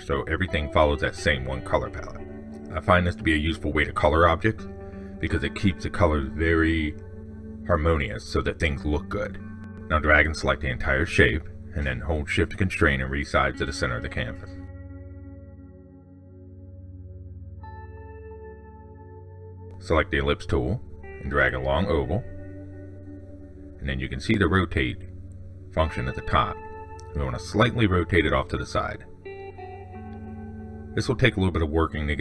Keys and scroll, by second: 31.3 ctrl+shift+Down.